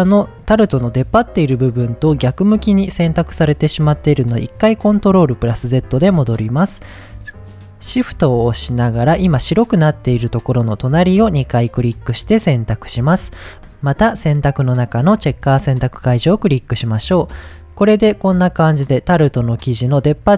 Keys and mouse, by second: 5.6 ctrl+z, 10.8 shift+click, 14.7-16.1 drag.